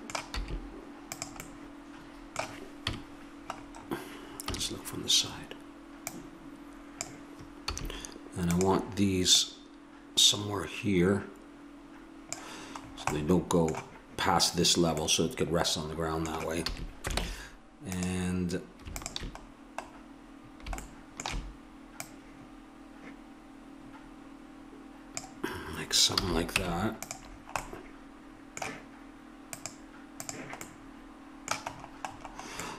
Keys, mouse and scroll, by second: 0.4 s, 2.9 KP_Decimal, 4.5 KP_3, 6.0-8.1 drag, 7.7 s, 9.4 click, 12.8 middle click, 16.7 a, 17.2 ctrl+Tab, 22.0-23.8 drag, 26.1 a, 26.6 Tab, 29.8-31.4 drag, 30.6 middle click.